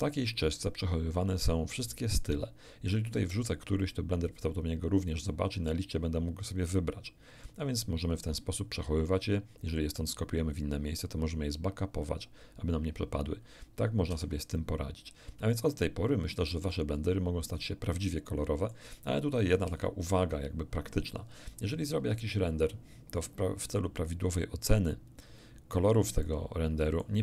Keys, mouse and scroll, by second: 14.1 ctrl+d, 15.8-18.9 shift+middle drag, 19.6 KP_1, 22.0 F12, 23.5-24.0 scroll down 2, 25.6-26.0 scroll up 2, 26.2 middle click.